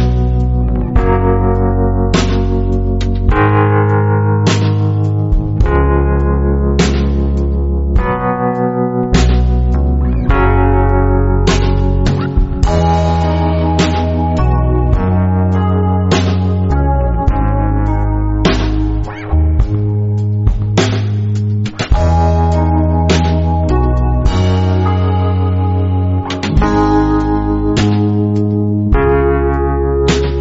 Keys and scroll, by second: 1.1-3.5 typing, 11.2 a, 18.3-20.9 typing, 23.5 space, 24.3 v, 27.9 o, 29.3 v.